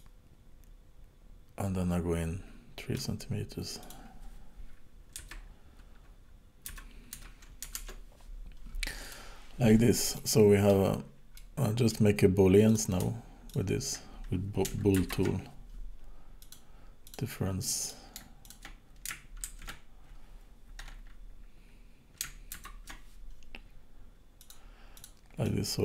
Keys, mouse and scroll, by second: 3.8 click, 9.1 click, 10.1 middle click, 10.9 scroll down 5, 11.4 middle click, 12.7 click, 13.5 shift+click, 15.0 ctrl+shift+b, 17.0 click, 17.9 click, 18.4 shift+click, 19.4 ctrl+shift+d, 22.5 ctrl+shift+b, 24.9 click, 25.5 middle click.